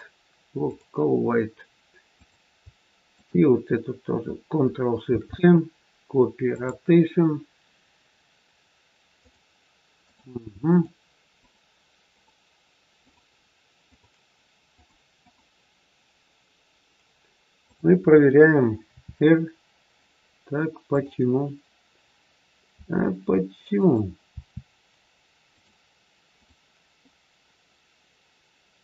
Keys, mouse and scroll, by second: 2.7 click, 3.0-3.4 shift+click, 4.9 ctrl+shift+c, 9.0 click, 11.3-18.9 click, 18.9 r, 22.7 r, 24.3 r, 26.3 click.